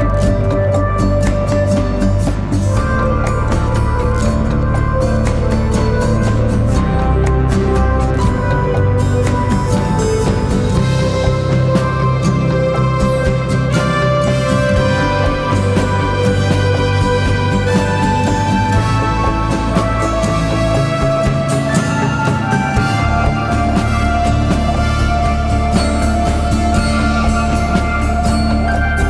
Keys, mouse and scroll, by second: 0.5-1.3 typing, 1.7 double click, 6.6-6.9 typing, 7.1 double click, 8.8 typing, 9.0 double click, 14.6 right click, 16.1-16.7 typing, 17.1 double click, 27.2 typing, 27.5 double click.